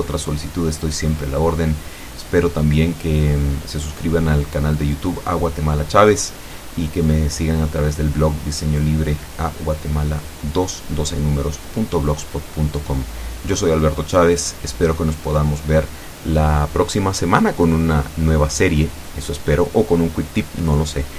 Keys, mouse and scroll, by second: 6.7 ctrl+s, 7.2 ctrl+Return.